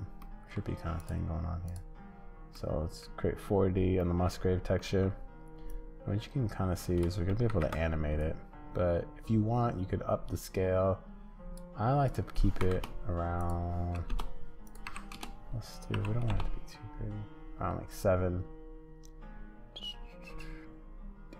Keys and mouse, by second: 0.2 middle click, 2.6 middle click, 4.1 middle click, 4.8 middle click, 7.5 ctrl+z, 10.5-21.3 drag.